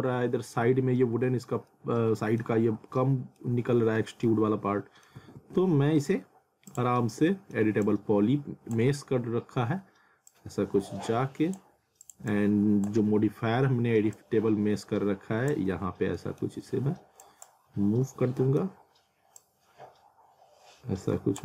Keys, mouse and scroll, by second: 1.7 alt+middle click, 2.6 scroll up 1, 3.0 alt+middle click, 4.2 alt+middle click, 5.2 w, 6.7 click, 7.2 middle click, 7.8 click, 9.0-9.3 scroll up 1, 10.3 click, 15.7 scroll down 1, 16.2 middle click, 16.6-17.0 scroll up 1, 17.2 click, 17.8-18.3 scroll up 1, 18.4 middle click, 19.4 click.